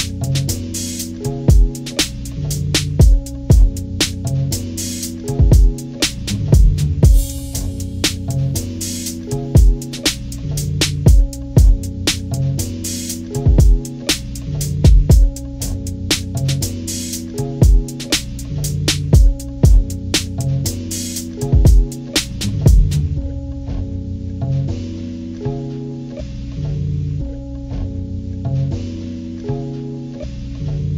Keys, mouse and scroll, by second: 0.0-1.9 drag, 2.3-4.3 drag, 5.9-10.2 drag, 10.5-14.5 drag, 14.9 click, 15.6 ctrl+-, 15.8 ctrl+-, 18.0 ctrl+=, 20.1 ctrl+scroll down 2, 20.6 ctrl+=, 22.9-24.4 drag, 25.3 click, 27.2 ctrl+=, 29.1 ctrl+=, 29.3 ctrl+=, 29.6 scroll up 2, 30.4 ctrl+=.